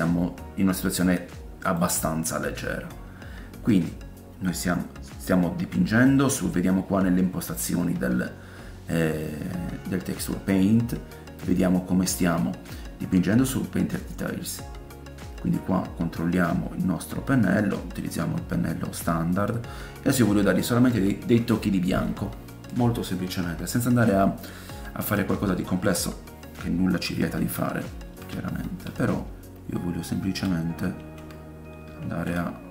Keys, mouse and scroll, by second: 0.8 click, 1.8-11.4 middle drag, 11.4-32.7 drag, 15.3-17.5 scroll down 3, 26.7 middle click, 27.3 shift+middle click, 27.7 ctrl+middle click, 31.3 ctrl+z, 32.2 ctrl+z.